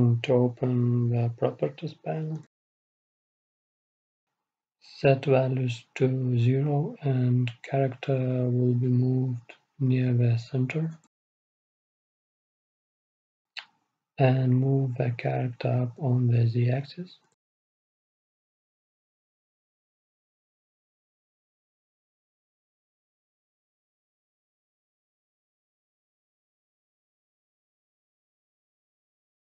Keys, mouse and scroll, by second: 0.7 n, 2.1-3.9 drag, 4.1-9.8 drag, 9.9-15.9 middle drag, 15.9-17.9 right drag, 17.9-19.9 drag, 22.2 KP_3, 23.7-25.5 drag, 27.7 KP_1.